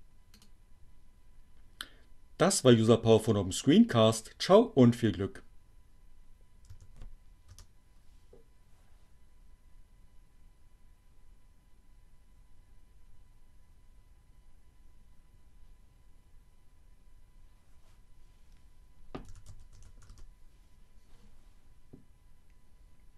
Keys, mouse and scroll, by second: 0.1 click, 5.3 w, 5.5 Return, 17.9-18.9 typing, 19.9 t, 20.1 Return.